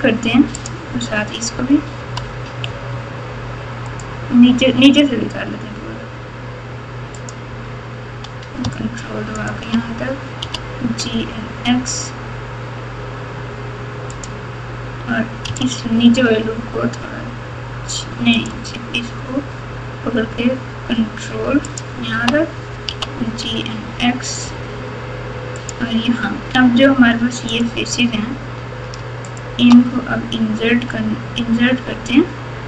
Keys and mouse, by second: 0.5 click, 1.9 g, 3.9-4.6 right drag, 9.3 ctrl+click, 10.4 g, 15.5 alt+click, 21.7 ctrl+click, 22.8 g, 26.8 3, 27.4 click, 29.3 shift+click, 30.6 i.